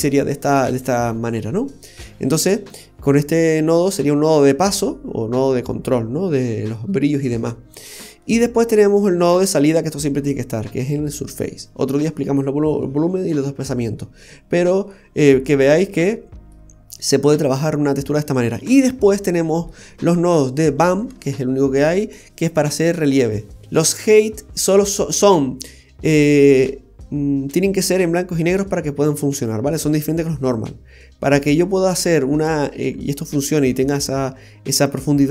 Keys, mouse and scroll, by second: 0.3 middle click, 4.1-5.0 scroll down 5, 5.9-6.3 scroll down 3, 7.8-9.2 scroll down 2, 8.2 middle click, 9.3 click, 10.2-10.5 scroll up 5, 15.1-15.7 scroll down 6, 16.1 middle click, 16.1 scroll down 3, 18.7-19.7 scroll up 5, 19.3 middle click.